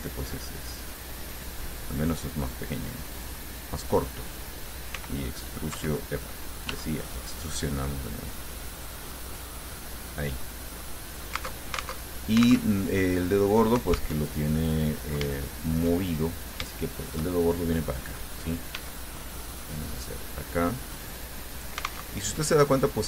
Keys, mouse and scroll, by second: 2.0 click, 3.4 click, 4.0 right click, 5.2 r, 6.0 Escape, 6.9 e, 9.1 click, 9.4-11.2 middle drag, 11.8 alt+Tab, 14.4 alt+Tab, 15.0-16.2 drag, 16.5 shift+right click, 16.9-18.3 shift+drag, 19.0 e, 21.8 alt+click, 22.3 alt+Tab.